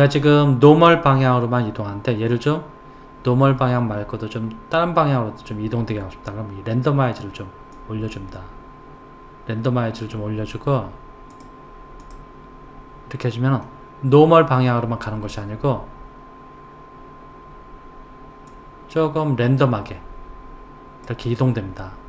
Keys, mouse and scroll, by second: 7.8 click, 11.3 click, 12.0 click, 13.6-16.6 middle drag, 18.5 click.